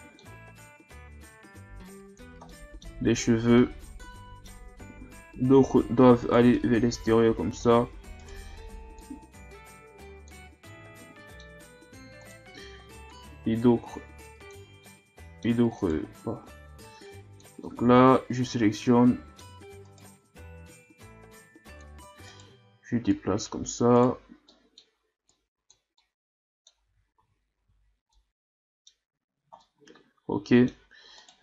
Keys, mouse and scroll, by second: 1.1-3.3 drag, 3.3 scroll down 3, 3.6-6.2 middle drag, 6.2 right click, 6.5 scroll up 1, 6.5-8.2 middle drag, 8.2 right click, 9.0-10.6 drag, 10.6-12.2 middle drag, 12.2 right click, 13.1 click, 14.8 middle click, 15.8 right click, 16.8 click, 17.6-19.8 middle drag, 19.8 right click, 20.8-22.3 drag, 22.3 right click, 23.1 click, 24.0 right click, 24.5 middle click, 25.3 click, 26.0 middle click, 26.8 Tab, 27.2 a, 27.6 a, 27.8-28.1 scroll down 1, 28.1-29.3 middle drag, 29.3 scroll down 1, 29.6-30.8 middle drag, 30.8-31.2 scroll up 1, 31.2 right click.